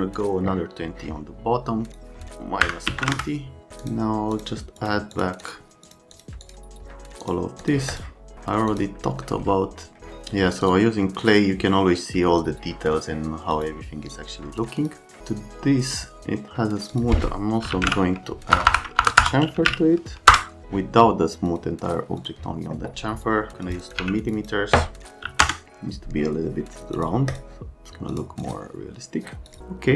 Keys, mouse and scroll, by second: 1.9 right click, 2.6 KP_Subtract, 2.9 KP_2, 3.0 KP_0, 3.1 KP_Enter, 3.8 click, 4.3 click, 4.8 click, 5.1 click, 5.4 click, 5.8 click, 6.1 click, 6.4 click, 7.2 click, 7.6 click, 7.9 click, 8.7 click, 10.6 click, 11.2 click, 13.5 click, 14.8 click, 16.9 click, 17.5-20.2 typing, 20.3 Return, 21.5 click, 22.2 click, 23.6 click, 23.8 click, 24.0 1, 24.2 click, 24.3 click, 25.2 KP_3, 25.4 KP_Enter, 27.0 click, 27.3 click, 28.1 click, 28.4 click, 29.5 click.